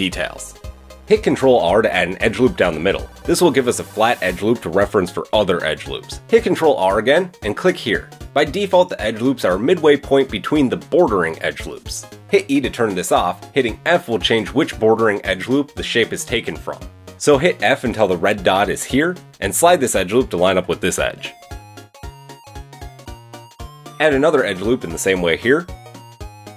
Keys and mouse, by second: 1.3 ctrl+r, 7.5 ctrl+r, 23.7 ctrl+r, 25.5 click, 26.5 shift+click.